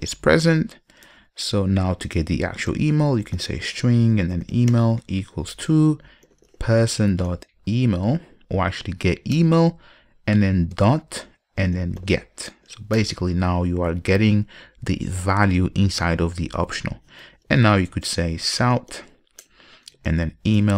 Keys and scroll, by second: 7.1 Return, 13.1 ctrl+shift+super+Return, 19.6 Return.